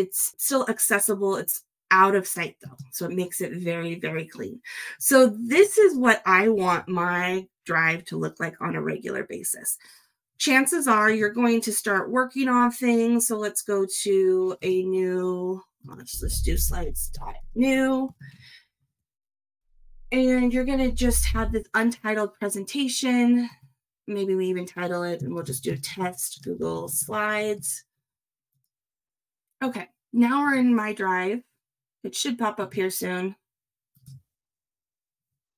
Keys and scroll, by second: 25.4 shift+t, 26.4 shift+g, 27.0 shift+space, 27.1 shift+s.